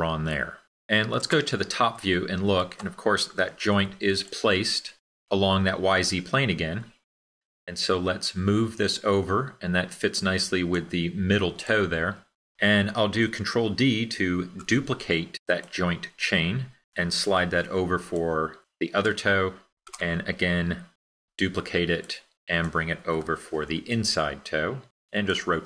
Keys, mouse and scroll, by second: 14.2 super+d.